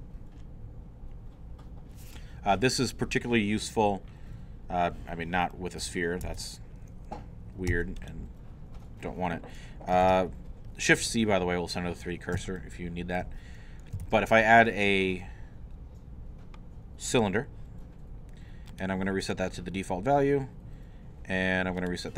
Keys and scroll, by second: 6.2 alt+Tab, 6.9 Tab, 7.7 x, 10.0 shift+c, 14.1 shift+a.